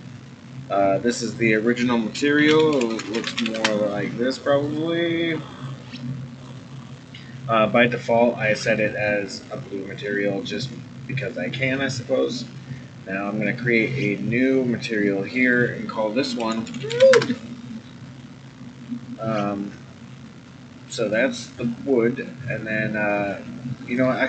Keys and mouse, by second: 1.1 click, 1.3-4.2 drag, 4.6 drag, 9.3 click, 13.7 click, 15.2 click, 15.5-18.0 drag, 16.8 o, 23.8-24.2 drag.